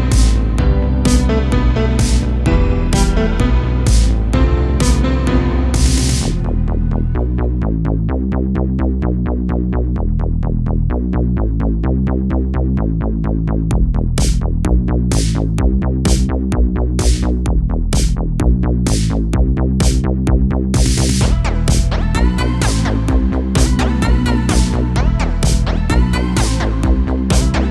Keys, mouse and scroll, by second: 0.7 g, 1.7-4.0 middle drag, 4.0 g, 5.5 g, 7.5 a, 7.7 a, 7.9 Tab, 8.4 scroll down 3, 8.7 a, 8.8 a, 9.3-9.7 scroll down 1, 9.7-10.8 middle drag, 10.8-11.2 scroll up 1, 11.2-12.5 middle drag, 12.5 shift+a, 14.5 ctrl+3, 16.2 g, 18.5-19.3 shift+middle drag, 19.3 right click, 20.3 Tab, 22.0 click, 22.5 3, 22.8 click, 23.8 i, 26.3 click, 27.0 a, 27.1 a, 27.4-27.7 scroll up 2.